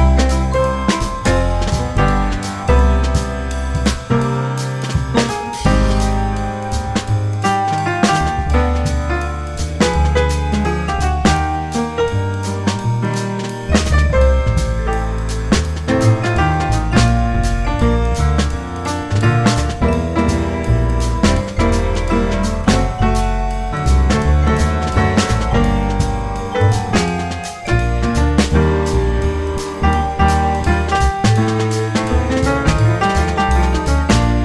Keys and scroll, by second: 0.7 ctrl+t, 2.8 F4, 5.6 F4, 9.4 F4, 10.6 2, 10.7 F4, 11.0 F4, 14.7 ctrl+r, 15.5 ctrl+r, 16.1 ctrl+r, 16.7 ctrl+c, 18.9 2, 19.7 F4, 21.6 F4, 22.6 2, 23.0 ctrl+r, 23.2 ctrl+c, 25.1 2, 25.8 F4, 27.1 F4, 28.7 2, 28.8 F4, 34.2 F4.